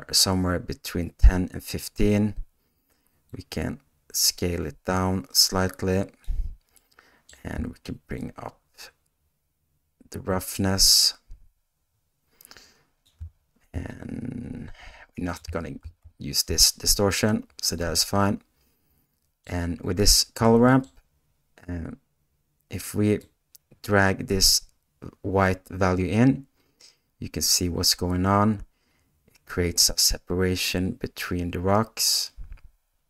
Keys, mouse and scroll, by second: 6.8-33.0 middle drag.